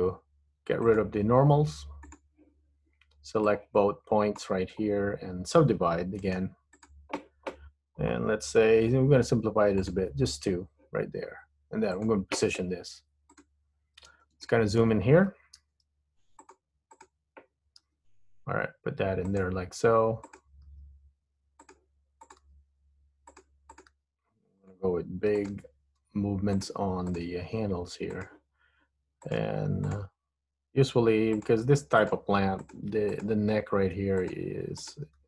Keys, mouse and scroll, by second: 1.0 click, 3.5 click, 6.4 right click, 9.9 click, 12.0 click, 13.4 click, 13.9-14.4 scroll up 3, 14.6 shift+middle click, 15.7 g, 17.0 click, 18.0 g, 20.4 click, 20.8 g, 22.4 click, 22.6 g, 23.8 click, 24.0 g, 25.6 click, 25.7 g, 27.3 click, 27.4 g, 29.4 click, 30.0 click, 30.8 g, 32.1 click, 32.4 g, 33.2 click, 33.4 g, 34.9 click.